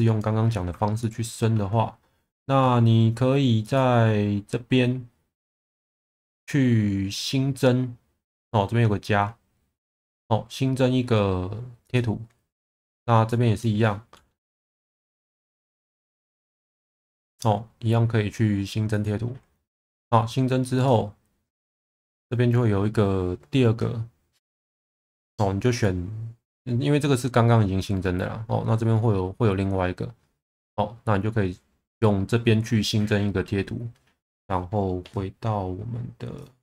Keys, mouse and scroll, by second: 1.0 shift+middle click, 3.7-19.1 drag, 20.9-32.7 drag, 36.5-36.6 drag.